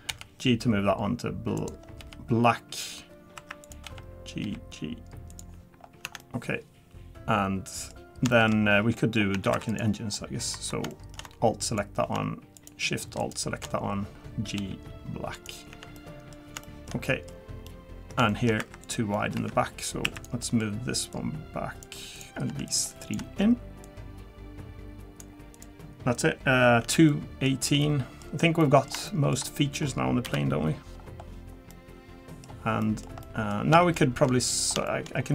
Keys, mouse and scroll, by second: 0.1 g, 2.0 g, 3.0 scroll down 2, 3.4 1, 3.6 click, 3.8 g, 5.8 scroll down 2, 6.0 Tab, 6.2 middle click, 8.3 shift+middle click, 8.6-9.0 scroll up 3, 9.0 middle click, 9.3 Tab, 9.5 3, 9.7 click, 10.1-10.7 scroll up 3, 10.9 shift+middle click, 11.6 alt+click, 12.6 alt+shift+click, 13.8-14.6 scroll down 3, 14.6 g, 15.7 Tab, 15.9 middle click, 16.6 shift+middle click, 17.5 scroll down 1, 17.7 middle click, 17.7-18.2 scroll up 1, 18.3 middle click, 18.6 2, 18.8 click, 19.1 middle click, 19.4 Tab, 20.0 1, 20.1 click, 20.4 middle click, 21.1 click, 22.1 click, 22.7 shift+click, 23.0 shift+click, 23.8 click, 25.5 click, 26.8 Tab, 27.1 middle click, 27.5 scroll down 1, 27.8 middle click, 28.3 scroll down 1, 28.6 middle click, 29.1 shift+middle click, 29.5 middle click, 30.2 KP_7, 31.0-31.3 scroll down 2, 31.7 middle click, 32.8 middle click, 33.2 middle click, 33.9 shift+middle click, 34.5 middle click, 34.6 scroll down 1, 34.9 shift+middle click, 35.1-35.3 scroll up 3.